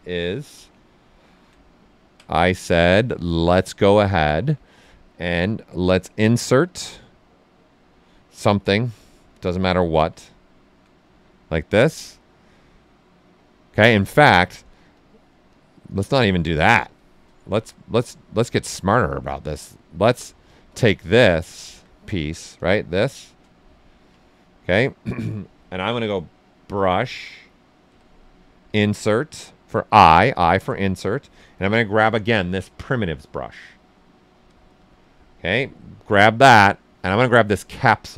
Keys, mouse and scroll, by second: 0.7 alt+right click, 2.2-5.7 ctrl+alt+right drag, 5.7 click, 6.0 typing, 9.4 click, 9.4 typing, 10.2 alt+right click, 13.8 ctrl+z, 14.9 click, 17.4 shift+f, 20.7 click, 21.2-22.5 alt+right drag, 22.5 click, 23.0 right click, 23.6 right click, 24.2 ctrl+right click, 25.9 n, 30.4-31.2 typing, 35.4 click.